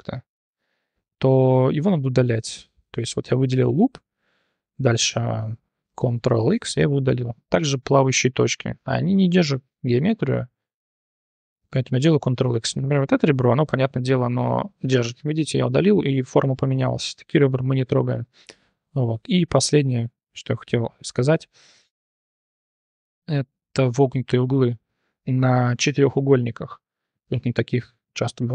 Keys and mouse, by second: 3.7 t, 6.5 ctrl+x, 7.0 1, 7.6 t, 11.9 ctrl+x, 12.6 2, 13.0 shift+click, 13.3 click, 14.6 ctrl+x, 16.0 ctrl+z, 17.8 shift+drag, 18.5 click, 19.6 1, 20.3 Tab, 21.1 shift+drag, 21.4 drag, 21.8 Tab, 23.4 1, 24.0 click, 26.6 click, 26.9 click, 27.3 3, 28.0 click.